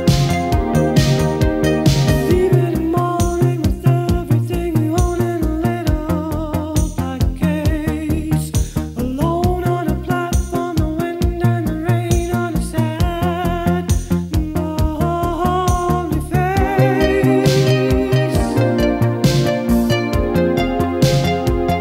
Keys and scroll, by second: 8.6 q, 10.9 f, 17.0 shift+p, 21.1 shift+p.